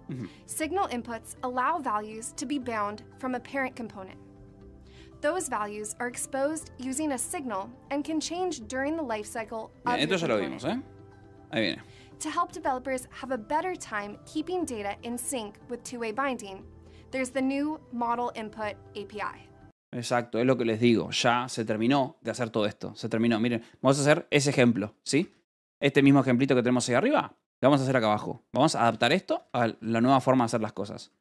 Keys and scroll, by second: 25.2-26.1 typing, 28.4 j, 28.7 k, 29.3 j, 30.7-31.2 typing.